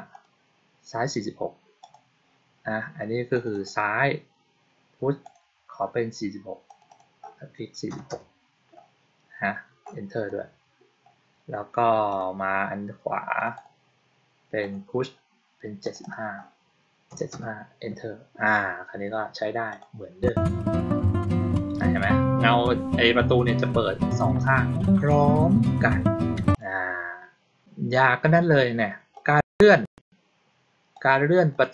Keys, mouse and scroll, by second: 0.0 click, 1.7 click, 3.3 click, 3.4 click, 5.2 click, 6.6 click, 6.8 click, 12.0 click, 13.3 click, 13.5 click, 14.5 click, 15.8 click, 15.9 click, 19.6 click, 26.4 click, 29.1 click, 30.8-31.4 drag.